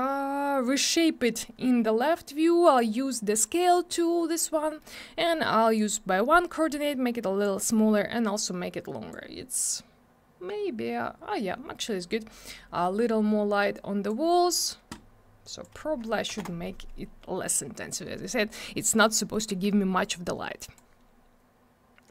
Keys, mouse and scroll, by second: 1.0 middle click, 2.1 middle click, 4.8 middle click, 5.7 click, 7.5 middle click, 8.2 click, 13.7 click, 15.4 click, 16.3 3, 16.3 Return, 19.1 middle click, 19.5 w, 20.0 click.